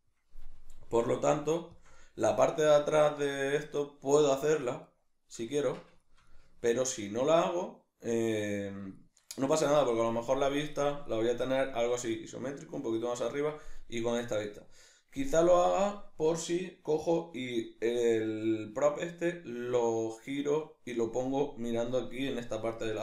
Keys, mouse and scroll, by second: 0.8 g, 1.8 shift+click, 1.9 middle click, 5.5 Tab, 5.5-23.0 middle drag.